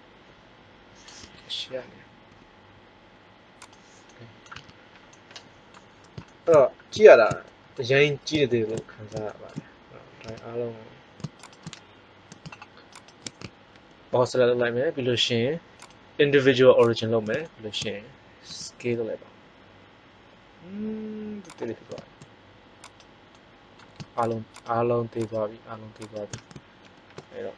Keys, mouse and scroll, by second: 1.1 KP_1, 2.2 r, 4.0-5.1 middle drag, 4.5 Tab, 10.2 Tab, 13.7 ctrl+l, 18.4 s, 22.7-25.4 right drag, 26.7 ctrl+l.